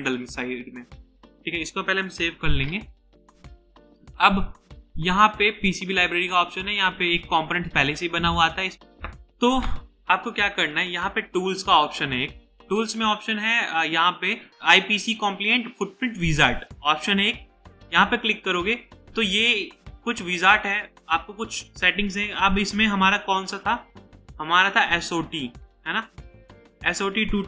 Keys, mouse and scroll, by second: 2.4 ctrl+s, 8.7 typing, 25.8 scroll down 1, 26.0-26.3 scroll up 1.